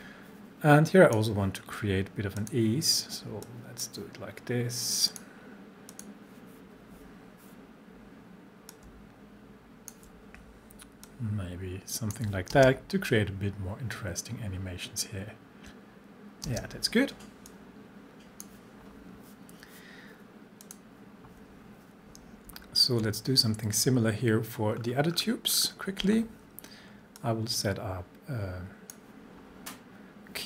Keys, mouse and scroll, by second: 0.9-4.1 drag, 8.7-11.1 drag, 11.1-12.4 shift+drag, 12.5 space, 16.4 space, 17.5-18.7 drag, 22.5 alt+scroll down 1, 24.7 scroll down 1, 27.2-29.0 drag.